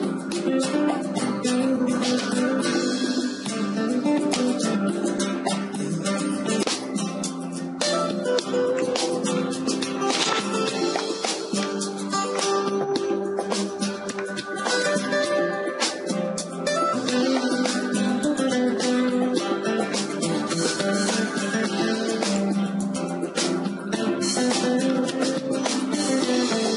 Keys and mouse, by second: 10.4-12.4 middle drag, 12.6 middle click, 13.5 right click, 14.2 middle click, 14.3 right click, 14.4 middle click, 14.5-16.8 right drag, 18.0-20.3 right drag, 20.3 ctrl+e, 23.4-26.0 middle drag, 26.0-26.7 right drag.